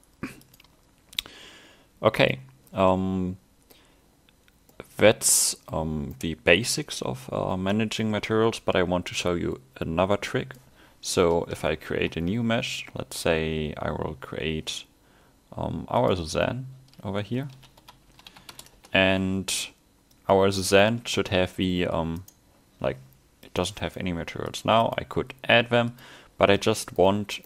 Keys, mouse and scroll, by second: 2.2 click, 2.9 middle click, 4.8 middle click, 5.9 scroll down 2, 6.2 middle click, 9.3 click, 11.9 shift+a, 20.2 click, 21.0 a, 21.3 scroll up 1, 21.5 middle click, 22.3 right click, 23.5 click, 23.8 click, 24.8 click, 26.7 middle click, 27.3 scroll up 1.